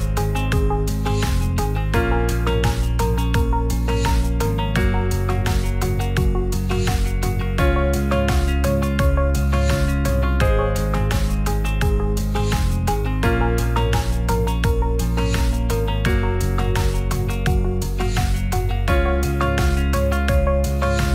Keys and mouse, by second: 1.7-2.1 middle drag, 2.6 g, 2.7 z, 5.1 g, 5.2 z, 6.8 click, 11.5 s, 13.2 click, 15.3 click, 17.1 s, 18.0 click.